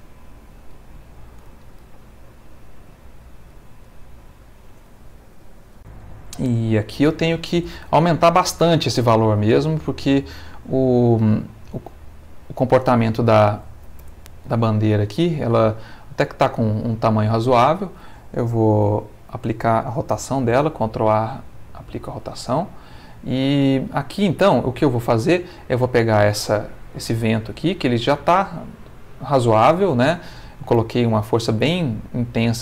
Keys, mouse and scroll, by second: 0.7 Escape, 1.6-3.7 middle drag, 3.9 click, 5.8 click, 6.8 click, 9.6 click, 14.0 n, 16.7-18.1 middle drag, 20.5 ctrl+a, 21.3 click, 22.5 space, 24.3 click, 25.0 middle click.